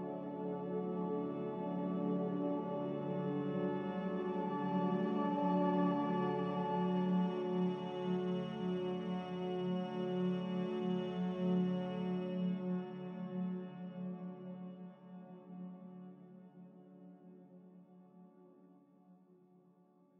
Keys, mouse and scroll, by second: 5.7 ctrl+z, 7.3 ctrl+z, 9.7 z.